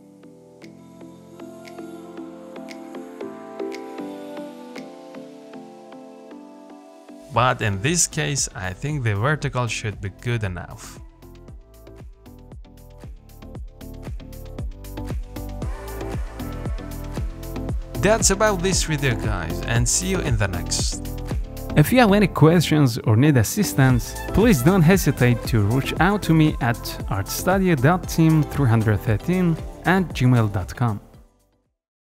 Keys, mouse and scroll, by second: 1.6 g, 5.6-6.5 scroll up 5, 5.9 shift+middle click, 6.5 middle click, 7.5-8.1 scroll down 4, 8.1 click, 8.3 scroll down 1, 8.5-10.6 middle drag, 10.6 ctrl+z, 10.8 ctrl+z, 11.0 ctrl+z, 12.0 click, 12.3-12.6 scroll down 2, 12.6 middle click, 13.5-14.3 scroll up 2, 13.8 shift+middle click, 14.3-15.3 shift+middle drag, 15.3 z, 15.5-19.1 middle drag, 19.1 click, 19.9 z, 20.9 shift+d, 26.7 click, 27.0 scroll down 1, 27.3-30.6 middle drag, 30.6 scroll down 1, 30.9-31.3 scroll up 1, 31.3 shift+middle click, 31.6-32.1 scroll down 1.